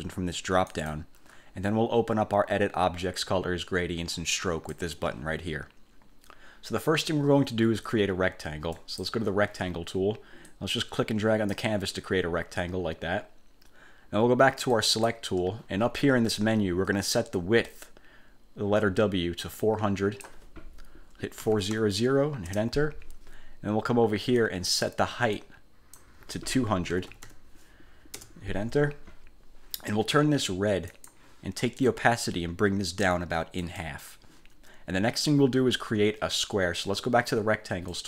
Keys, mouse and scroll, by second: 0.8 click, 4.5 click, 8.9 click, 10.6-11.8 drag, 14.9 click, 19.7 click, 21.3-22.2 typing, 22.7 Return, 24.5 click, 25.5 click, 27.0 2, 27.3 0, 28.3 Return, 31.1 click, 33.7 click.